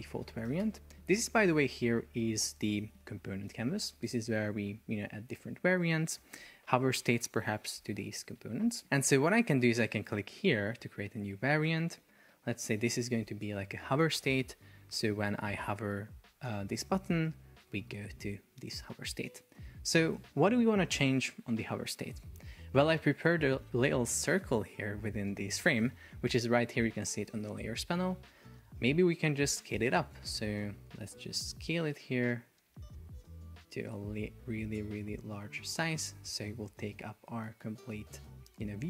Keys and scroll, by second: 0.7 Return, 11.8 super+r, 12.4 shift+h, 13.2 Return, 17.0 shift+super+4, 17.7 Escape.